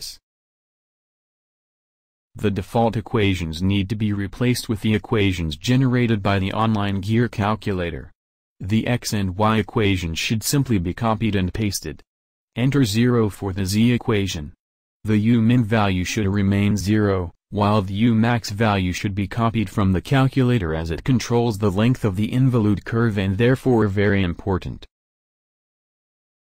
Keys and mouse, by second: 0.1 click, 1.4-3.1 drag, 3.8 alt+Tab, 6.9 alt+Tab, 7.7-9.0 drag, 12.3-14.3 drag, 21.4-23.3 drag, 23.5 click.